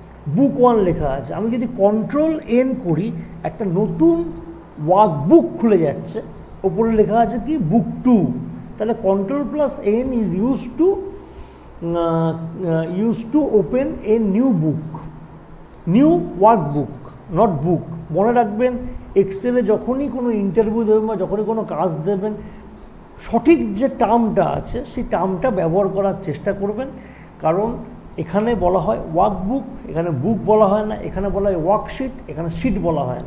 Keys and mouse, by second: 2.3 click, 2.9 ctrl+n, 9.3 click, 19.4 click.